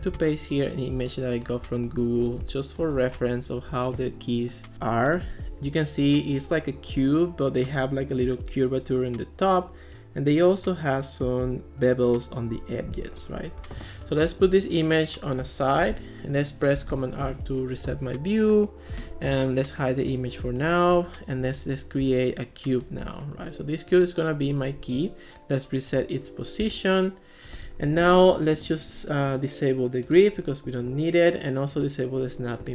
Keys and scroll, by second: 0.1 super+v, 2.4 space.